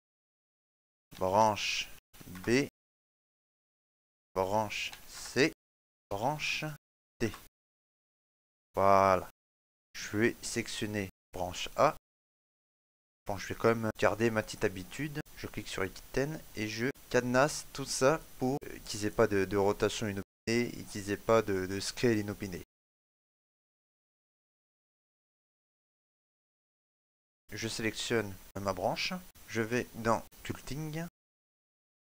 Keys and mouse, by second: 0.5 click, 9.3 shift+middle click, 9.6 shift+middle click, 10.0 middle click, 11.1 right click, 15.2 middle click, 15.9 right click, 15.9 click, 20.2 right click, 21.5 click, 23.1 right click, 24.3 click, 25.3 right click, 25.6 click, 27.3 right click, 27.3 shift+middle click.